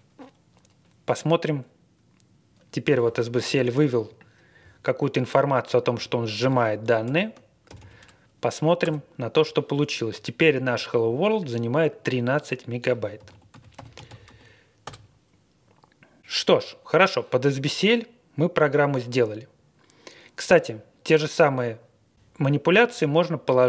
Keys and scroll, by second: 7.0 ctrl+l, 7.7 typing, 8.8 Return, 12.9-14.6 typing, 14.8 Return.